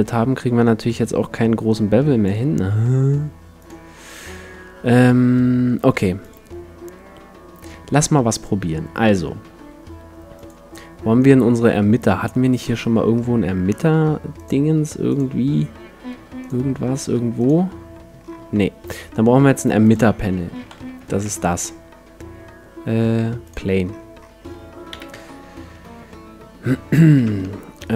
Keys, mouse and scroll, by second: 3.6-5.5 drag, 6.3-8.0 drag, 8.0-8.4 scroll down 1, 8.4-10.2 middle drag, 10.8-12.2 drag, 11.6-12.0 scroll down 1, 12.2 middle click, 14.4-19.2 drag, 19.8-21.6 drag, 20.7 shift+c, 21.1 shift+a, 23.9-26.2 middle drag, 24.9 KP_7, 27.2 Tab, 27.8-27.9 right drag.